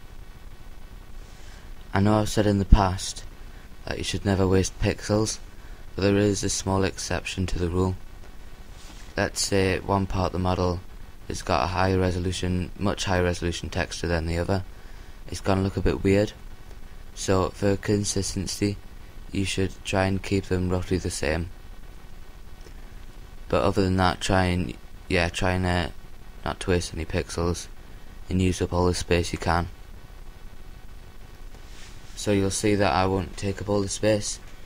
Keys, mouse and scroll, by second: 4.8-7.8 drag, 4.8 a, 7.8 l, 8.4 l, 13.5 shift+l, 15.0 g, 17.1-19.2 drag, 19.2 l, 20.4 shift+l, 22.8 s, 27.9-29.1 drag, 27.9 g.